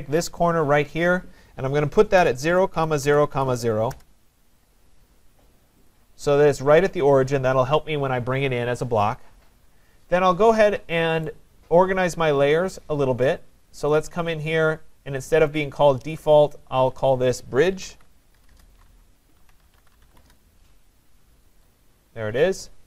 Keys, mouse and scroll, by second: 1.1 click, 1.9-4.0 typing, 4.9-5.9 scroll, 5.9 click, 6.6 right click, 11.3 right click, 11.9-13.5 right drag, 15.4 click, 16.1 click, 16.3 click, 17.3 click, 17.7-20.9 typing, 21.6 click, 22.7-22.8 typing.